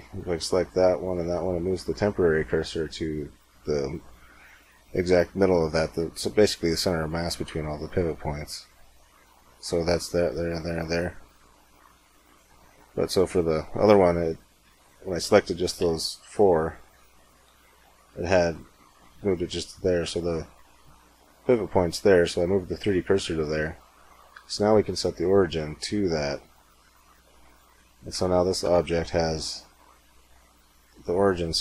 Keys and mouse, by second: 15.5 a, 16.1 c, 20.0-21.8 drag, 23.5 Tab, 24.3 space, 28.0 Tab, 28.5 Tab, 28.7 z.